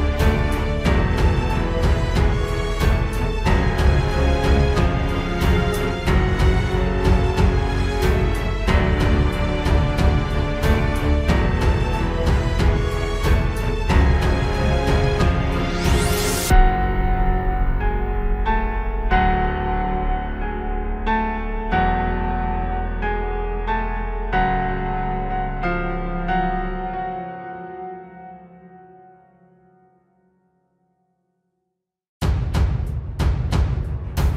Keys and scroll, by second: 0.4 ctrl+space, 2.0 ctrl+space, 2.9 ctrl+space, 3.6 ctrl+space, 3.8 ctrl+s, 4.4 ctrl+space, 7.0 ctrl+z, 8.2 ctrl+space, 9.9 ctrl+space, 10.5 ctrl+s, 12.6 ctrl+space, 16.4 ctrl+z, 18.4 ctrl+z, 20.2 ctrl+space, 20.8 ctrl+s, 20.9 ctrl+space, 22.1 ctrl+space, 22.8 ctrl+space, 23.1 ctrl+s, 24.8 ctrl+space, 25.8 ctrl+space, 26.7 ctrl+space, 29.6 ctrl+z.